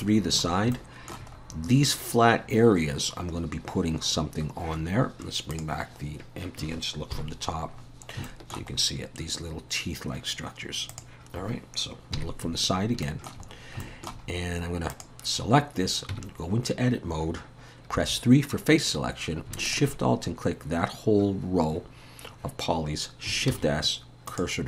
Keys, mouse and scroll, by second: 0.5 scroll up 2, 0.7 shift+middle click, 1.3-1.7 scroll up 2, 5.5 click, 7.1 KP_7, 7.8-8.3 scroll down 5, 8.3 shift+middle click, 8.8-9.6 scroll up 1, 10.2-10.9 scroll up 1, 10.9 click, 12.2 KP_3, 13.0 shift+middle click, 13.5-13.8 scroll up 2, 13.8 shift+middle click, 14.3-14.7 scroll up 2, 14.9 click, 18.0 3, 19.7 alt+shift+click, 23.5 shift+s.